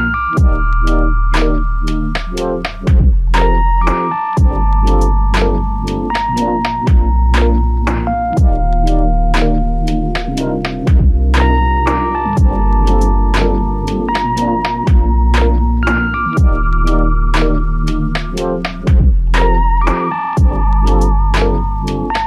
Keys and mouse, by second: 0.5 alt+click, 1.7 typing, 3.5 double click, 4.7 alt+click, 5.3 shift+click, 7.1 shift+click, 8.0 shift+click, 8.0 alt+click, 11.3 f, 12.7 double click, 18.4 double click, 18.5 shift+click, 19.4 shift+click.